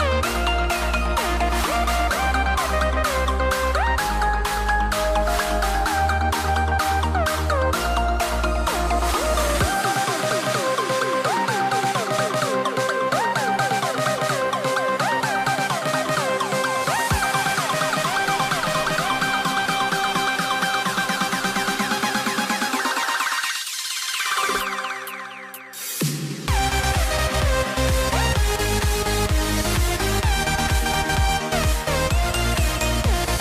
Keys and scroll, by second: 2.1 super+z, 5.9 super+z, 6.8 super+z, 11.0 super+z, 14.3 super+a, 14.6 shift+m, 20.4 super+a.